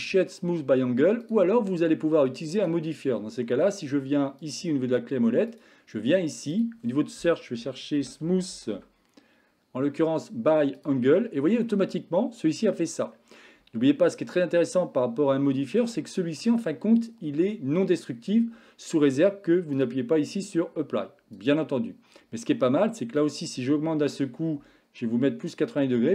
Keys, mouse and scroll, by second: 1.1 click, 5.6-10.8 drag, 8.4 o, 11.7-13.1 middle drag, 14.9-15.8 middle drag, 16.0-16.5 shift+middle drag, 19.8-21.1 drag, 23.1-26.1 drag.